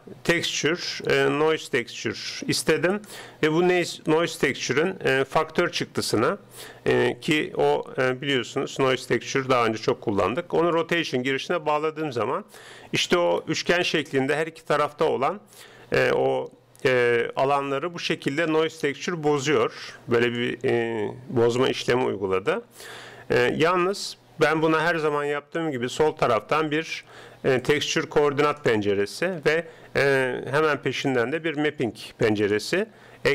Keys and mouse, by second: 5.4-7.0 drag, 8.4-10.2 drag, 12.2-15.2 middle drag, 16.1-22.5 middle drag, 23.6-26.2 middle drag, 26.2 shift+a, 29.4 shift+a.